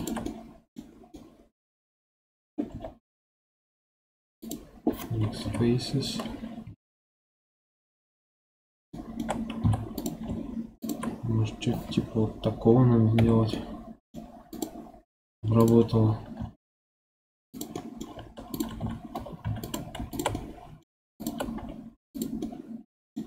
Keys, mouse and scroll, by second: 0.2 middle click, 0.8 scroll down 2, 1.0-2.6 middle drag, 2.6 x, 5.3 KP_1, 6.6 KP_3, 7.8-8.8 scroll up 2, 8.8 shift+middle click, 9.5 1, 9.9 click, 10.7 shift+click, 13.1 j, 13.4-14.4 middle drag, 14.4 click, 15.5 shift+click, 16.3 j, 16.5 middle click, 17.4 click, 17.7 middle click, 18.4 shift+click, 18.7 j, 19.3 3, 19.5 click, 20.0 shift+click, 20.3 middle click, 21.1 shift+click, 21.5 x, 22.3-23.2 middle drag.